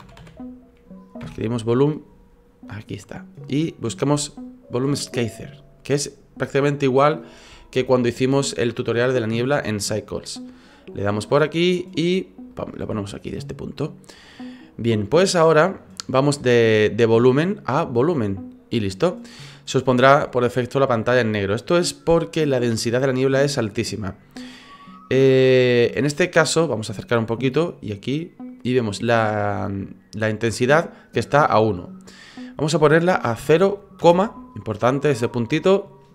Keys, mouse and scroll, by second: 12.5-13.4 typing, 12.9-16.5 scroll down 4, 17.5 click.